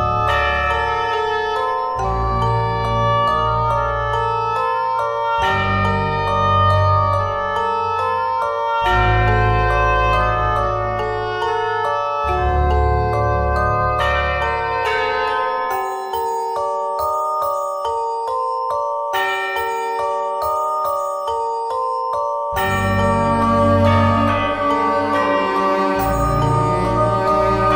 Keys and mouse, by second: 0.5 click, 0.7 c, 2.5 click, 2.8 c, 6.3 e, 7.3 s, 8.8 z, 9.1 z, 9.7 z, 11.7 KP_1, 12.1 z, 13.8 e, 17.5 right click, 18.4 c, 24.9 c.